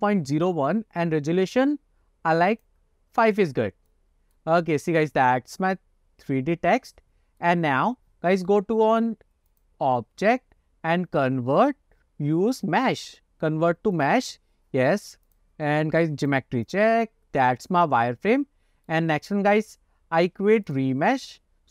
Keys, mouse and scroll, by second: 2.6 click, 4.0-4.5 middle drag, 4.7-5.0 shift+middle drag, 5.1-7.6 middle drag, 9.6-14.1 drag, 15.4-16.6 drag, 16.8 click, 17.2 scroll up 1, 17.5-19.0 middle drag, 20.8 click.